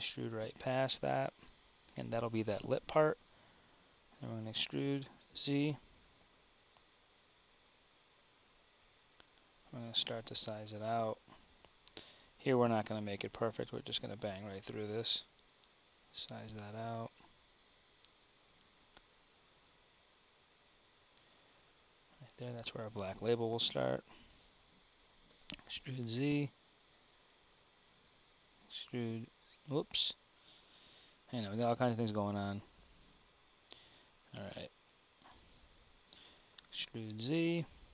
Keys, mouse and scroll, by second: 4.5 e, 25.3 e, 29.9 `, 32.1 g, 36.7 e.